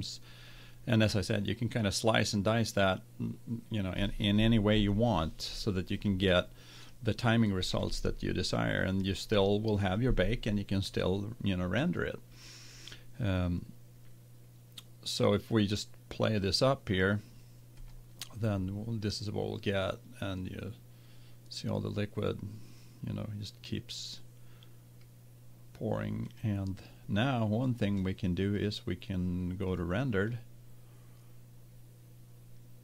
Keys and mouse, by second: 16.3 click, 26.4-28.1 drag, 28.5-31.1 drag.